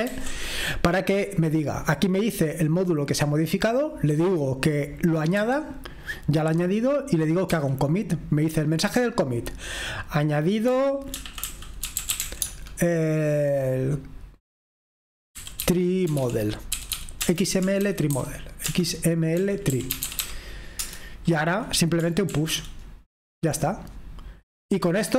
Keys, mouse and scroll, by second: 0.3 ctrl+g, 5.4 typing, 8.0 typing, 10.7-12.7 typing, 15.3-20.6 typing, 20.8 Return, 22.2 shift+p, 25.0 typing.